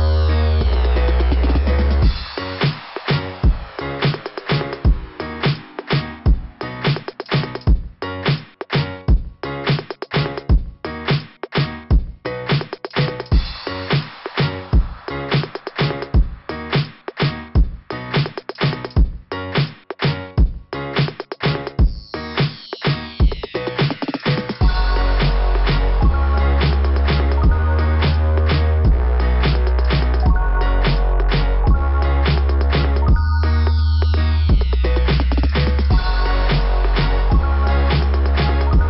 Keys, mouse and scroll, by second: 1.3 click, 2.1 click, 2.4 click, 2.8 click, 4.2 scroll up 1, 10.0 click, 10.2 click, 11.6-12.7 scroll down 2, 13.5 click, 20.9 click, 23.0 click, 23.2 click, 24.0 click, 24.1 click, 24.6 click, 24.7 click, 25.7 click, 25.8 click, 30.6 Return, 30.6 r, 30.8 Return, 31.1 Return, 31.4 r, 33.3 click, 33.3 click, 33.4 click, 33.5 click, 33.6 click, 33.8 double click, 35.2 click, 35.2 click.